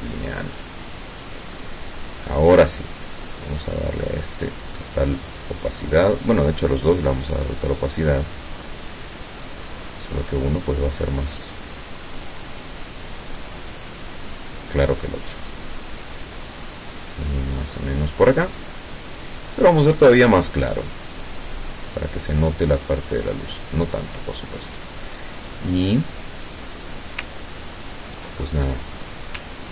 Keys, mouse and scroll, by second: 1.5 click, 3.5-4.7 drag, 6.0 click, 9.2-10.3 drag, 11.9-13.6 drag, 14.4-18.5 drag, 19.3 click, 21.1-23.5 drag, 26.5 click, 27.5-28.1 ctrl+scroll down 2, 28.5 ctrl+middle click.